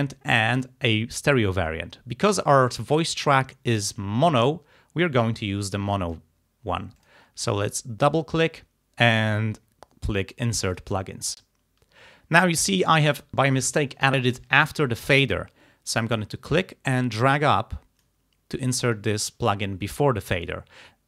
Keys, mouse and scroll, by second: 0.6 click, 1.6-3.0 drag, 5.6 click, 6.4-7.0 scroll up 2, 7.0 click, 7.3-8.0 scroll up 2, 8.0 click, 10.8 click, 16.3-18.3 drag.